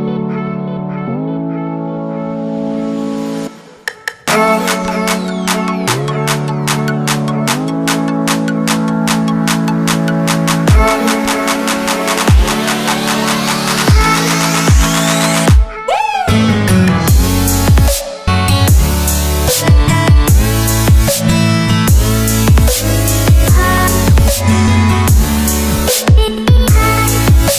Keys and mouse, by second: 0.1-2.2 middle drag, 5.5 space, 10.3 shift+middle click, 11.1-11.9 shift+middle drag, 12.3 shift+a, 15.6 ctrl+alt+KP_0, 18.6-20.5 typing, 21.6-24.0 typing.